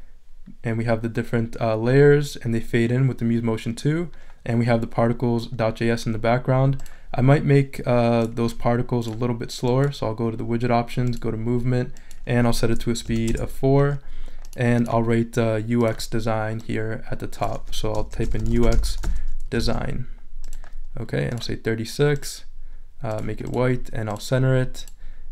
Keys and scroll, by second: 13.0 4, 13.3 Return, 17.9-19.5 typing, 19.6 shift+super+a, 20.3 super+a.